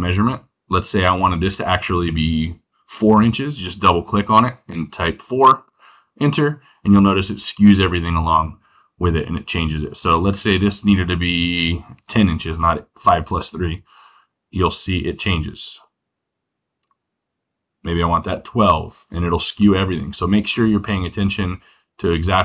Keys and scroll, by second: 4.7 4, 11.9 1, 12.0 0, 17.7 1, 17.8 2.